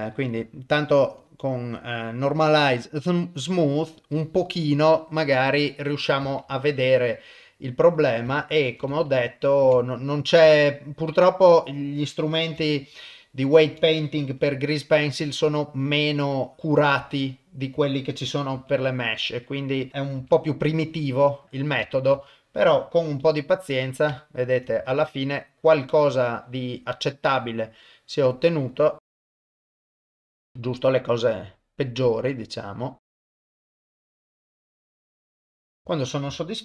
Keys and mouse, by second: 1.2-2.5 drag, 6.4 ctrl+Tab, 8.0 click, 9.1 ctrl+Tab, 10.9 ctrl+click, 14.4 r, 17.3 ctrl+click, 18.5 r, 19.9 ctrl+click, 20.2 r, 22.0 ctrl+click, 22.2 shift+middle click, 23.2 r, 24.4 ctrl+click, 24.8 r, 29.0 click, 29.1 click, 29.3 click, 29.6 click, 29.7 ctrl+z, 30.0 click, 30.4 shift+middle click, 31.1 click, 33.0 click, 33.2 click, 33.6 click, 33.8 ctrl+z, 33.9 click, 34.1 click, 34.2 click, 34.9 r, 34.9 click, 35.2 ctrl+click, 35.2 r, 35.5 ctrl+click, 35.7 r, 35.8 shift+middle click, 35.8 a.